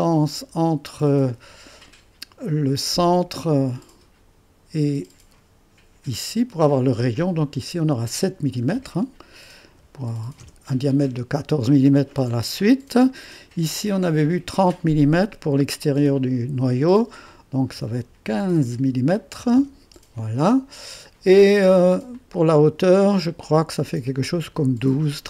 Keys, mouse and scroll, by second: 0.0 click, 2.8 click, 7.9 click, 9.5-10.2 typing, 10.4 Return, 13.1 click, 15.2 click, 15.8 click, 17.3-18.4 drag, 18.4 KP_1, 19.4 KP_5, 19.6 Return, 22.2 click, 23.1 typing.